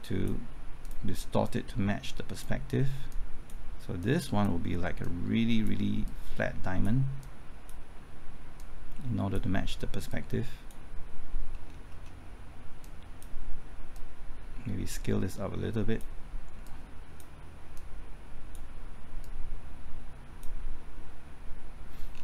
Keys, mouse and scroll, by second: 11.5-11.9 scroll down 1, 11.9-12.8 scroll up 1, 12.8-20.8 drag, 22.1-22.2 scroll down 1.